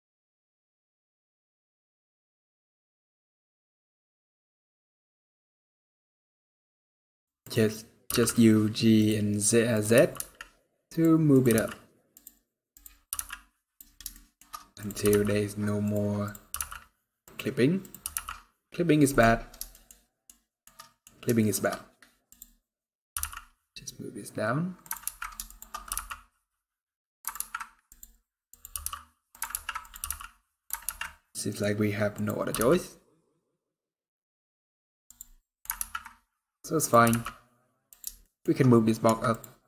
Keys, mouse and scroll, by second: 1.2-2.1 scroll down 4, 1.4 click, 1.5 g, 2.1 shift+middle click, 2.2-2.5 scroll up 3, 2.5 click, 2.7 g, 3.4 middle click, 3.5 scroll up 2, 3.7 shift+middle click, 4.0 click, 4.3 ctrl+click, 4.5 g, 5.3 scroll down 5, 5.4 alt+a, 5.6 shift+middle click, 5.7 scroll up 1, 5.9 click, 6.4 ctrl+click, 6.6 g, 7.2 click, 7.8 g, 9.5 click, 9.7 g, 11.0 click, 11.2 g, 12.5 click, 12.8 g, 13.8 shift+middle click, 14.5 click, 14.7 g, 16.0 click, 16.2 g, 17.5 click, 17.8 g, 19.4 shift+middle click, 19.8 shift+middle click, 20.0 shift+scroll up 1, 20.2 shift+middle click, 20.5 middle click, 20.8 scroll up 1, 21.1 shift+middle click, 21.4 shift+scroll up 2, 22.0 click, 22.0-22.9 scroll up 5, 22.9 g, 24.8 ctrl+z, 25.2 shift+click, 25.6 g, 27.2 ctrl+z, 27.6 click, 28.5 g, 29.3 ctrl+z, 29.5 click, 29.8 g, 30.6 ctrl+z, 30.8 middle click, 31.9 click, 32.3 g, 35.1-36.0 scroll down 8, 35.1 middle click, 35.6 ctrl+z, 36.5 click, 36.8 g, 37.9 shift+middle click, 38.5 scroll down 2, 38.8 Tab.